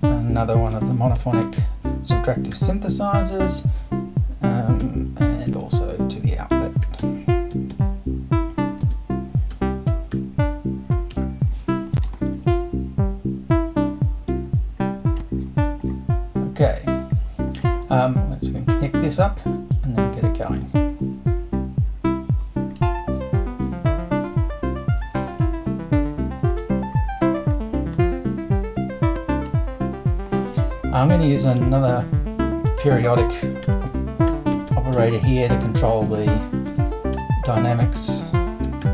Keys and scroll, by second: 0.0-1.4 typing, 3.3 super+0, 3.4 super+`, 4.8 BackSpace, 5.5 super+i, 6.5 super+o, 6.6-11.1 typing, 31.6 super+i, 33.2-35.4 typing, 36.7-38.9 typing.